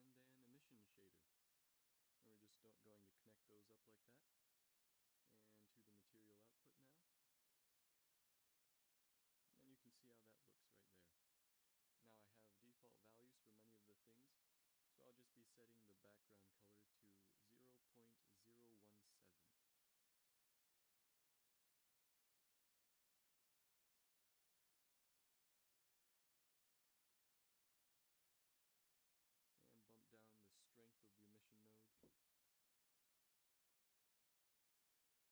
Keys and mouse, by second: 0.4 shift+a, 8.4 f, 9.3 shift+z, 24.1 ctrl+s, 26.3 g, 31.7 middle click, 34.2 z, 34.3 z.